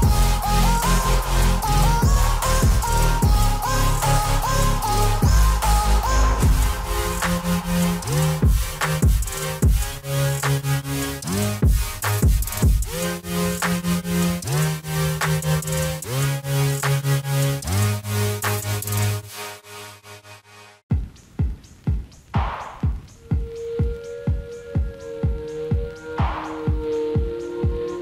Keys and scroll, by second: 9.3 F4, 22.1 F4.